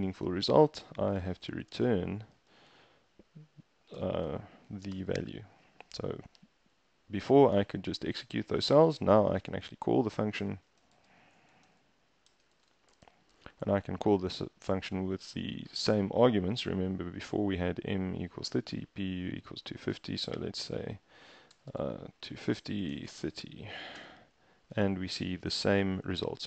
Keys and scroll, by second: 0.9-4.6 typing, 5.0 shift+Return, 9.5 Return, 10.2-13.6 typing, 20.4-23.7 typing, 24.0 shift+Return.